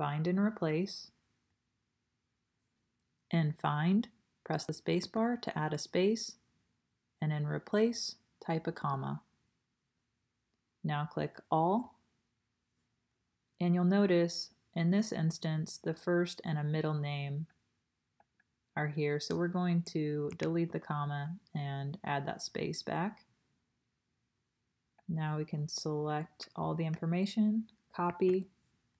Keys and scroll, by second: 10.0 space, 20.3 BackSpace, 20.7 space, 28.1 super+c.